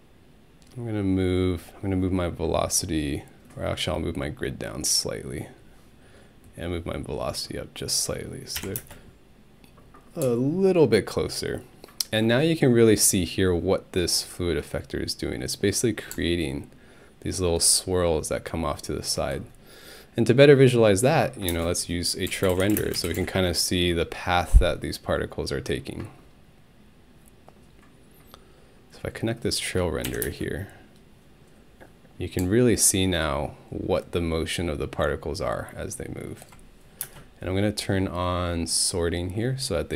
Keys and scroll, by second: 8.6 Home, 8.8 space, 21.5-23.7 typing, 30.1 Home, 30.2 space, 37.0 alt+space.